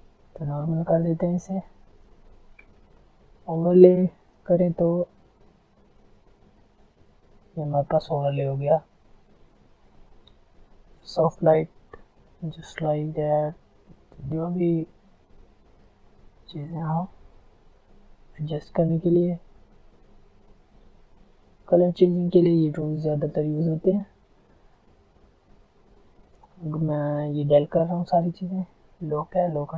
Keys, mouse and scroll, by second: 3.7 ctrl+click, 7.7-8.5 alt+scroll up 2, 8.5-9.9 alt+scroll up 1, 9.9 click, 21.8 click, 25.0-29.7 drag.